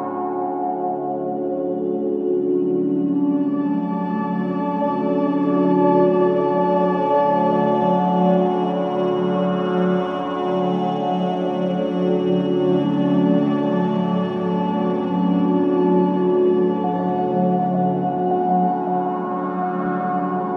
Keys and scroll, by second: 8.4 ], 9.1 ], 13.5 Escape, 17.7 Escape, 19.1 Escape.